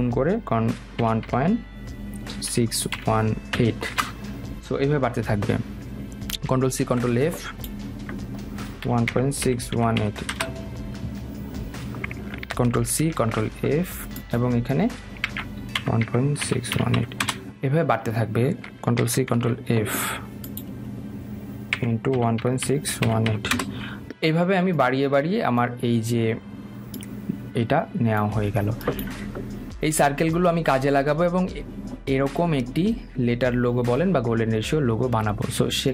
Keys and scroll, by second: 4.1 Return, 7.0 ctrl+f, 10.5 Return, 12.9 ctrl+c, 13.4 ctrl+f, 17.4 Return, 19.2 ctrl+c, 19.5 ctrl+f, 23.7 Return.